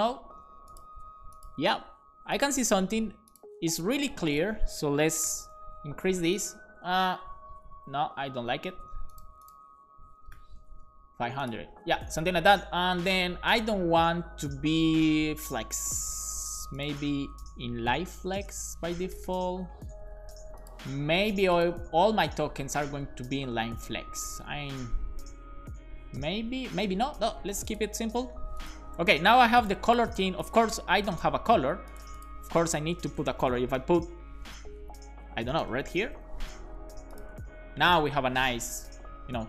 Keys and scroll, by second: 5.2 BackSpace, 10.4 BackSpace, 10.7 super+s, 18.2-19.7 typing, 23.4 shift+super+Left, 24.3 super+x, 24.4 Up, 24.6 Up, 24.7 Up, 25.6 Right, 26.2 super+z, 26.8 super+s, 33.0-36.6 typing.